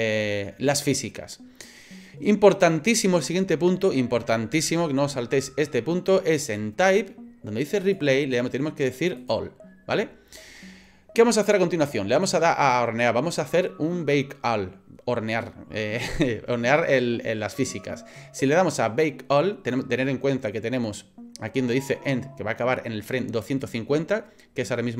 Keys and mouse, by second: 7.8-9.5 drag.